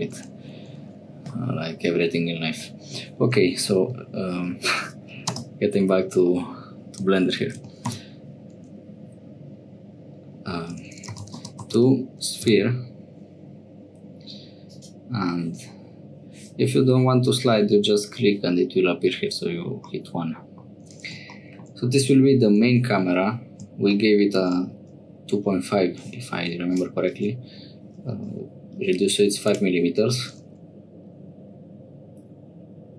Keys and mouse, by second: 10.8 BackSpace, 11.0 BackSpace, 19.9 middle click, 26.4 1, 26.7 click, 29.4 click.